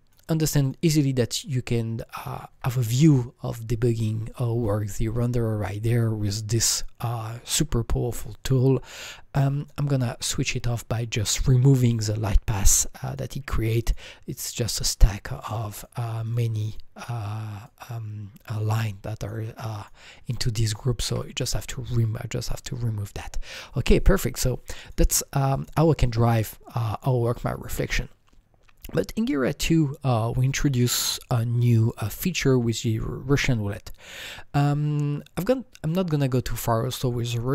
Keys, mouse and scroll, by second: 9.6-10.9 alt+drag, 9.6-10.9 alt+right drag, 10.9 alt+double click, 13.1 click, 13.8 click, 14.6 click, 15.0-15.8 drag, 15.8 click, 16.7 click, 17.6 click, 19.8 click, 21.1 Delete, 24.9 Delete, 24.9-25.4 drag, 25.6 click, 34.0-37.5 drag.